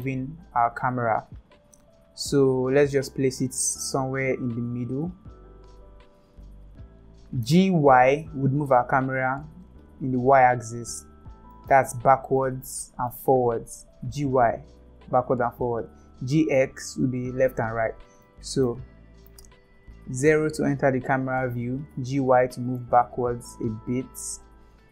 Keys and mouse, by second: 7.4 g, 12.4-13.1 middle drag, 14.0 g, 16.5 g, 18.2-18.7 middle drag, 20.2 KP_0, 21.9 g.